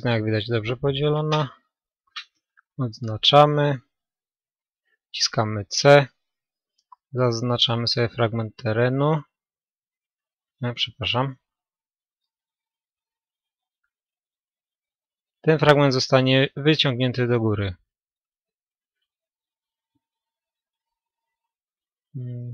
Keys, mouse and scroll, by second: 1.9 a, 4.5 c, 11.9-13.3 right drag, 12.3-14.0 drag, 13.0 c.